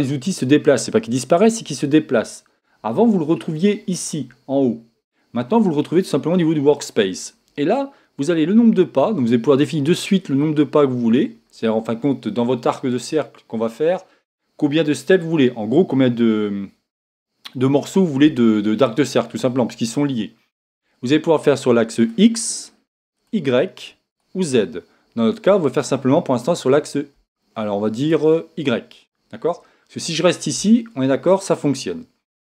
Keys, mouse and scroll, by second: 22.4 click, 23.2 click, 24.1 click, 26.4 click, 28.1-32.5 drag.